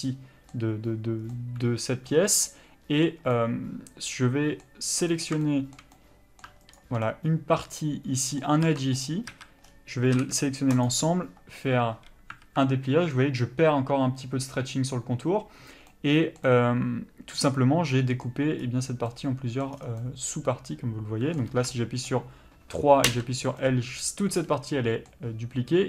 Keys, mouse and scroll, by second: 5.1 click, 5.4 shift+middle click, 6.7 ctrl+click, 7.0 middle click, 9.0 ctrl+e, 9.3 a, 9.6-10.8 scroll down 1, 10.8 u, 12.4 alt+a, 15.9 middle click, 18.6 scroll up 1, 19.1 middle click, 19.6 scroll down 1, 20.0 middle click, 21.5 3, 21.7 middle click, 23.1 l, 23.6 middle click.